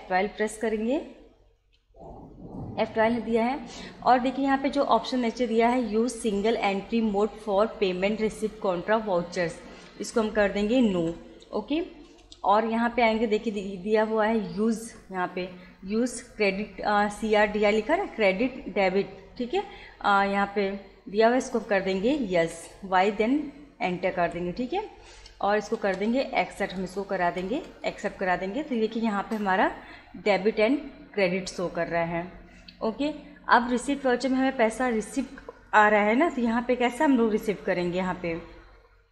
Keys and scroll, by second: 1.6 F12, 4.9 Return, 11.0 n, 12.1 Return, 13.4 Return, 22.4 y, 24.2 Return.